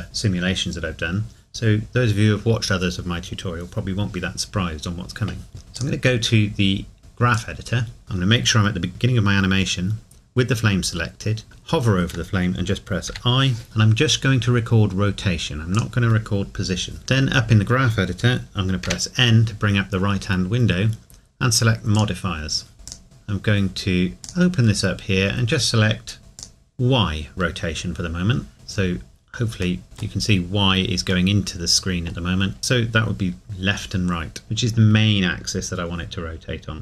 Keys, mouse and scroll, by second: 5.8 click, 7.3 click, 8.0 scroll down 1, 13.1 i, 15.7 click, 15.8 click, 18.8 n, 22.7 click, 24.2 click, 29.8 middle click.